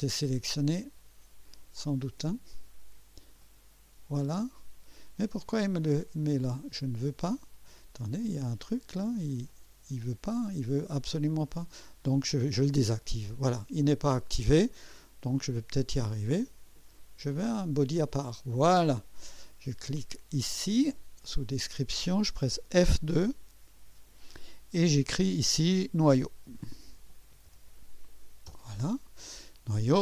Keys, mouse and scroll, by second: 0.6 click, 3.4 click, 7.0 click, 8.2 click, 8.7 click, 9.5 click, 11.5 right click, 12.2 click, 12.8 click, 17.3 click, 20.6 click, 23.8 F2, 26.0-28.5 typing.